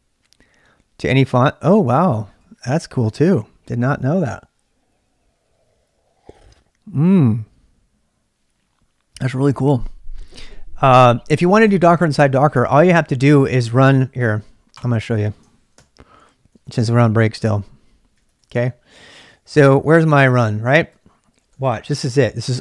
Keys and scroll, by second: 15.7 ctrl+c, 16.2-21.4 typing.